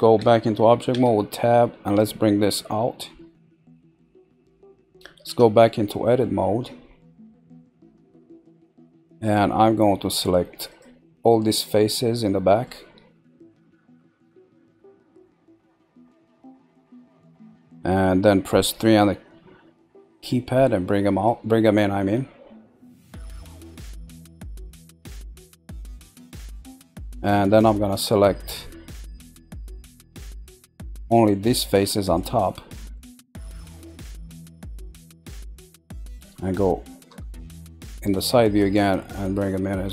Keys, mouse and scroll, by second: 0.9 Tab, 2.0 click, 3.5-4.2 middle drag, 5.2 Tab, 6.4-7.0 scroll up 2, 7.0-8.7 shift+middle drag, 8.7-10.7 scroll up 2, 10.7 click, 11.5 shift+click, 12.2-15.7 middle drag, 15.7 shift+click, 16.5 shift+click, 18.7 KP_3, 21.2 click, 26.6-31.1 middle drag, 32.0 click, 32.5-35.1 middle drag, 35.1 shift+click, 35.5-37.0 middle drag, 37.0 KP_3, 38.8 click.